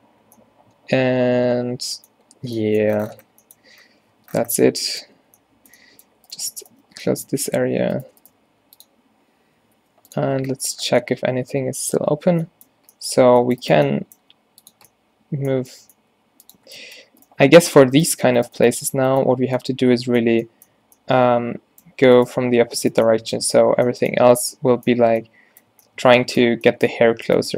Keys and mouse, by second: 2.5 Tab, 3.3 z, 3.8 z, 4.2 Tab, 4.6 a, 5.2 a, 6.9 f, 8.5 g, 9.8 r, 10.2 z, 10.4 Tab, 13.0 Tab, 13.7 click, 14.3 g, 16.3 g, 16.7 Tab, 17.7 Tab, 18.3 g, 19.5 z, 20.3 a, 21.7 a, 22.3 click, 23.0 click, 23.6-25.0 drag, 23.8 a, 24.2 a, 25.1 z, 25.8 Tab.